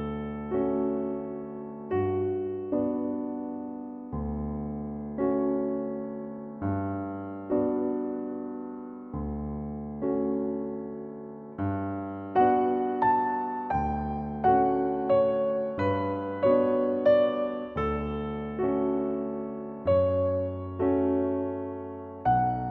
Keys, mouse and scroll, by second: 0.6 middle drag, 0.9 scroll up 1, 1.1 click, 1.2-1.9 shift+middle drag, 1.9 click, 2.4 middle click, 2.8 click, 3.9-5.3 drag, 6.7 click, 7.5-8.1 drag, 8.2-8.5 drag, 8.9 click, 9.3 middle click, 9.4 Tab, 9.6 middle click, 9.9 drag, 10.2 right click, 10.7 click, 11.9 click, 12.7-13.3 middle drag, 13.8 click, 13.9-14.4 scroll down 2, 14.4-14.8 drag, 14.8 middle click, 15.3 scroll up 1, 15.4 middle click, 16.1 click, 17.1 middle click, 17.5 click, 17.7-18.2 middle drag, 18.2 click, 18.6 scroll down 2, 18.7 middle click, 19.3 Tab, 20.3 middle click, 20.7 scroll up 5.